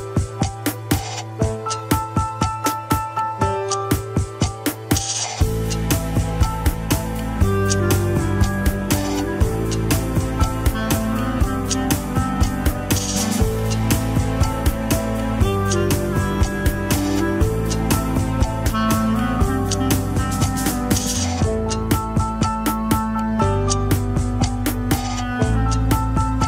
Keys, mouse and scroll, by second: 1.2 scroll down 2, 1.4 KP_7, 1.6-1.9 scroll up 3, 1.9 alt+z, 2.2 shift+middle click, 2.6 alt+z, 3.1 alt+z, 3.9 click, 4.1-7.1 drag, 7.1-7.6 scroll up 2, 7.6 alt+z, 7.9 g, 10.4 click, 10.7 shift+click, 11.1 g, 12.0 click, 12.2 g, 13.2 click, 13.7 g, 14.9 click, 15.3 shift+click, 15.5 KP_1, 15.8 scroll up 1, 16.0 alt+z, 16.3 shift+middle click, 16.5-16.9 scroll up 1, 16.9 alt+z, 17.9 ctrl+r, 19.0 shift+n, 19.7 middle click, 20.4 scroll down 1, 20.7 KP_7, 20.9 scroll up 1, 21.2-22.7 shift+middle drag, 22.7 click, 23.2 click, 24.4 g, 25.5 click, 25.7 g.